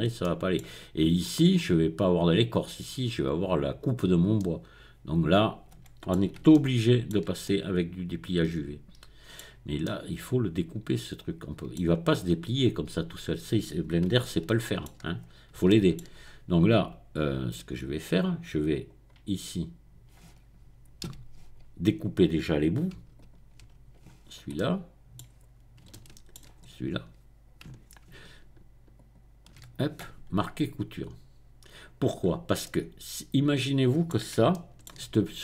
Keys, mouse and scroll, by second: 0.2 middle click, 0.5-1.2 scroll down 1, 4.4-6.4 middle drag, 6.5-14.0 shift+middle drag, 14.6 shift+middle click, 15.2-15.7 scroll up 1, 15.7 shift+middle click, 16.1-17.1 shift+scroll down 1, 17.6 right click, 18.7 click, 19.3-20.1 scroll up 2, 20.2-20.9 scroll down 2, 21.2 a, 23.2 alt+click, 23.4 alt+middle click, 24.2-25.1 scroll down 2, 25.1-26.6 middle drag, 26.6-27.4 scroll up 2, 29.0 alt+shift+click, 29.8 right click, 31.7 click, 32.2-32.6 scroll down 1, 32.6-34.3 middle drag, 34.6 shift+middle click.